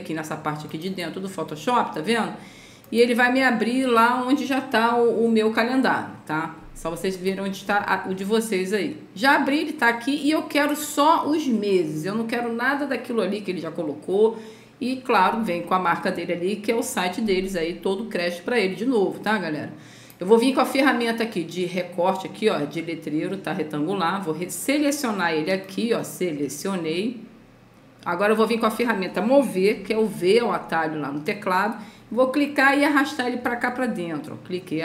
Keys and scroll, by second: 30.0 v.